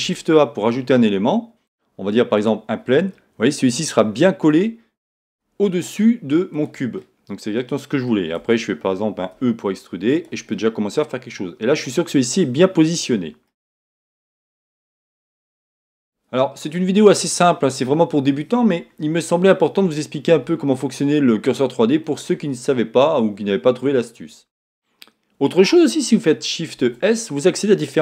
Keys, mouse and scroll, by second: 0.0 shift+a, 4.5-5.6 scroll up 2, 5.6 s, 6.6 click, 8.4 Tab, 9.3 middle click, 10.2 click, 10.5-12.2 middle drag, 14.2-14.8 shift+scroll up 2, 14.6 middle click, 14.8 Tab, 15.1 scroll down 1, 15.5 shift+middle click, 20.0-28.0 middle drag, 26.8 shift+s.